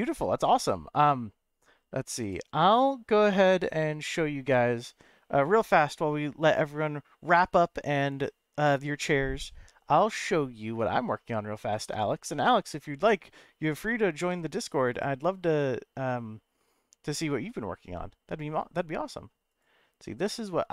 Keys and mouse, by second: 3.4-4.5 middle drag, 9.9 middle click, 15.1-20.7 drag.